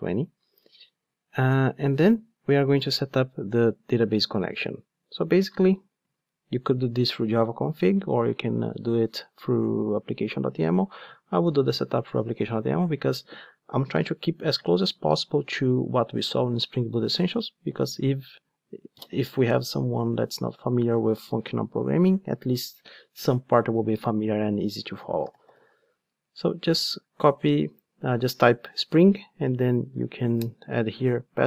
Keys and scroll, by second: 30.4 Return.